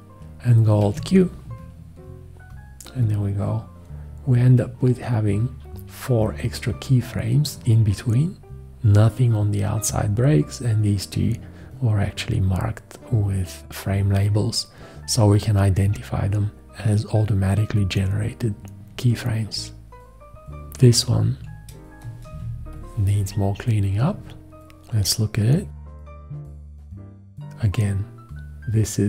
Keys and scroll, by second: 0.8 alt+q, 22.4 ctrl+space.